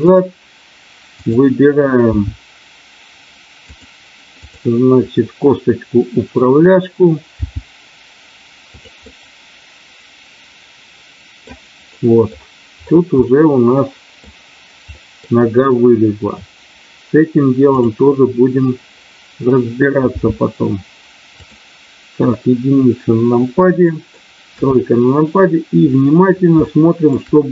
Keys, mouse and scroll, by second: 0.0 click, 0.0 g, 1.2 click, 2.0 g, 3.7 click, 4.5 click, 7.3 g, 8.7 click, 10.1-11.4 middle drag, 11.9 middle click, 13.2-13.9 scroll up 1, 13.9-14.3 scroll up 1, 14.8-15.3 scroll up 1, 20.1 g, 22.2 KP_1, 23.7 middle click, 24.4 KP_3, 26.6-27.1 shift+scroll up 1.